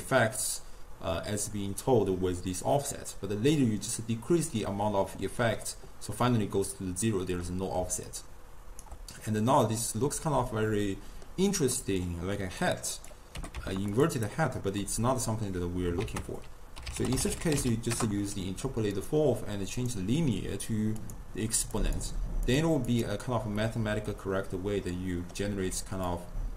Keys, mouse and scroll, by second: 7.5 middle click, 7.9 d, 8.1 right click, 8.9 d, 9.7-12.7 middle drag, 12.7 click, 13.4 g, 14.3 click, 14.9-16.0 middle drag, 16.0 ctrl+a, 19.8-22.7 drag, 23.0 click, 23.6 scroll down 1, 23.7-25.8 middle drag, 25.8 d, 26.1-26.5 drag.